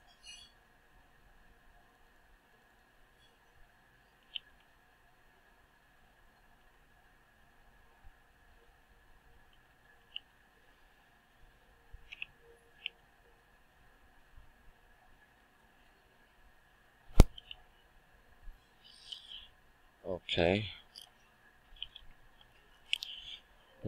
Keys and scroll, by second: 9.4 ctrl+w, 17.3 Return, 21.8 ctrl+Tab.